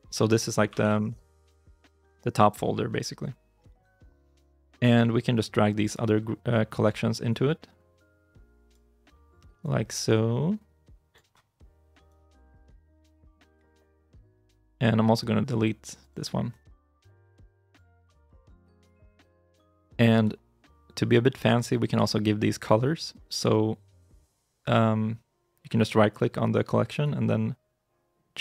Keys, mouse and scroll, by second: 0.0-1.9 typing, 3.5 Return, 26.8 right click.